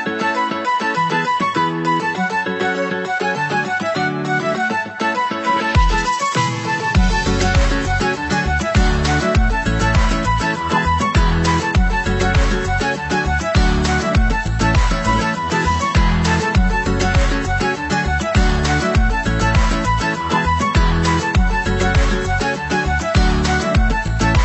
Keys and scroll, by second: 4.5 ctrl+=.